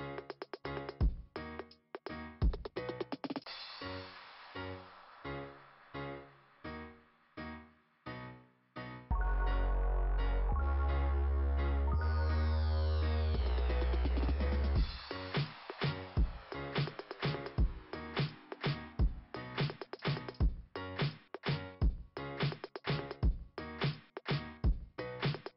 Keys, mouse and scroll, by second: 5.4 scroll down 2, 9.0-9.4 scroll up 2, 9.5 scroll up 1, 10.7 scroll up 2, 12.9 scroll down 2, 13.5 ,, 14.5 click, 15.0 right click, 16.8 click, 17.1 click, 17.4 click, 17.6 click, 19.4 click, 19.7 click, 19.8 double click, 20.9 double click, 20.9-23.9 typing.